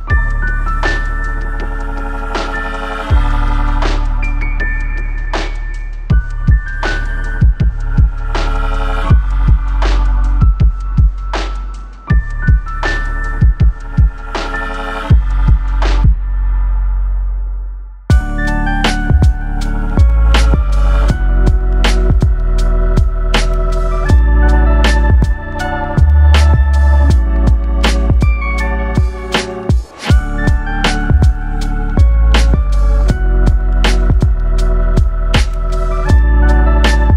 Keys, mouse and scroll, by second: 0.6-1.2 scroll up 3, 1.2-1.6 scroll down 3, 1.6 middle click, 2.6-3.4 scroll up 1, 3.4-3.8 scroll down 1, 3.9 middle click, 5.4 Tab, 5.9 middle click, 7.9 scroll up 1, 8.6 click, 9.3 middle click, 12.2 click, 13.1-13.7 scroll up 3, 13.7-14.2 scroll down 3, 14.4 shift+middle click, 14.8-15.2 scroll up 4, 15.9-16.2 scroll down 2, 16.5 middle click, 17.1 scroll down 2, 17.6 middle click, 34.1 shift+middle click, 34.9 middle click, 35.5-35.9 scroll up 3, 36.1 shift+middle click, 36.7 scroll up 1.